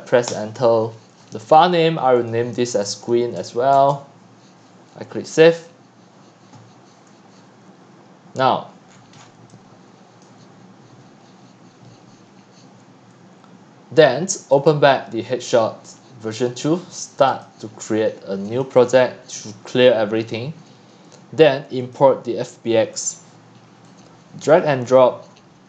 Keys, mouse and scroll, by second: 0.3 Return, 2.2 click, 2.6-4.4 typing, 5.5 click, 7.3 click, 8.9 click, 8.9-9.4 scroll up 15, 10.2-12.8 drag, 14.5 click, 16.5 click, 17.3 click, 19.8 drag, 20.4 click, 22.9 click, 24.2-25.3 drag.